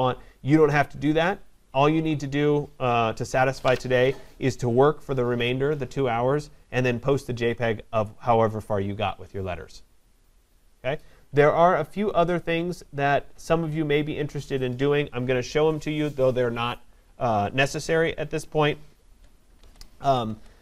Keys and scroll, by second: 19.6 ctrl+=.